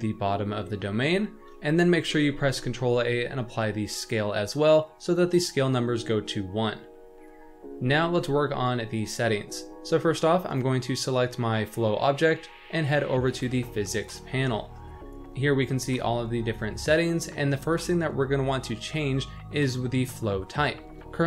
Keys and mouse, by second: 1.2 shift+middle drag, 2.1 ctrl+a, 7.7 n.